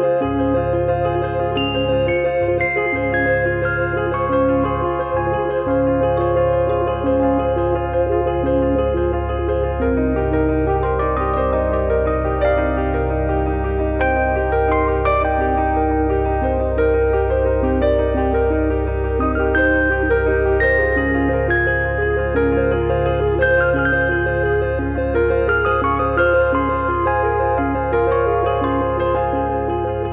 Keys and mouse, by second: 0.1 click, 2.9 Delete, 4.3 click, 6.2 click, 7.0 click, 8.0 click, 8.2 click, 9.5 click, 10.8 click, 11.8 click, 12.9 click, 13.7 click, 14.9 click, 16.0 click, 17.6 click, 18.4 click, 19.1 click, 19.3 click, 20.1 click, 21.4 click, 22.1 click, 25.0 click, 25.8 click, 27.0 click.